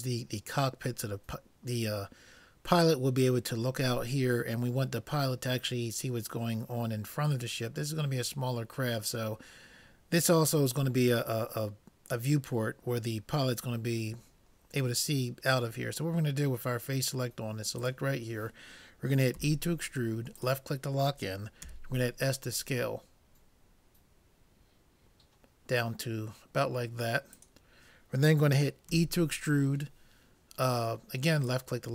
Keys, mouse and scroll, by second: 17.8-19.6 drag, 19.4 e, 21.6 s, 29.0 e.